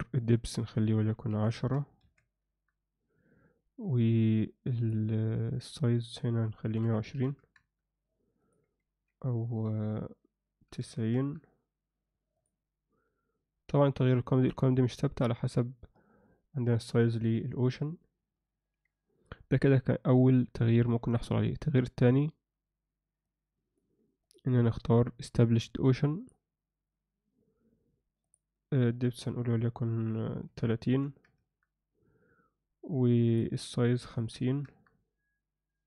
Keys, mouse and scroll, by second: 0.4 Escape, 0.4-2.5 drag, 4.8-7.6 drag, 8.4-11.2 drag, 12.4 click, 21.9 Escape, 23.2 click, 24.2-26.3 drag, 28.2-31.4 drag, 33.4-34.6 drag.